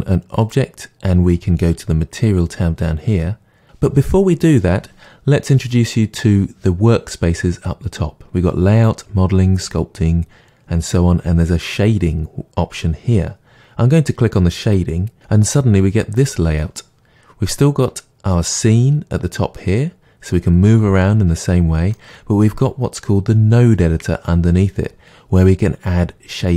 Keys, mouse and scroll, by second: 0.4 click, 15.1 click, 17.3-21.3 middle drag.